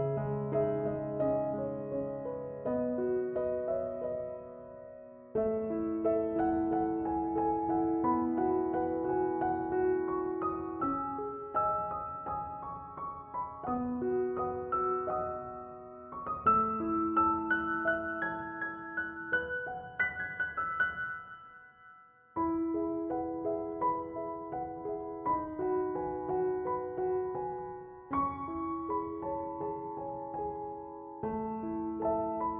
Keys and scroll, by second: 16.5 5, 16.8 Return, 25.0 2, 25.4 Return.